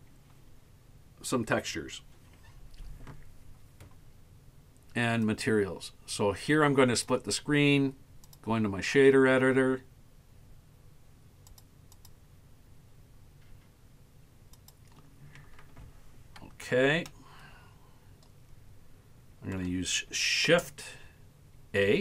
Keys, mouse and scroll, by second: 5.3-7.1 drag, 8.2-11.6 drag, 11.9-14.7 drag, 15.9-17.0 scroll down 4, 17.1-19.7 shift+middle drag, 21.9 shift+a.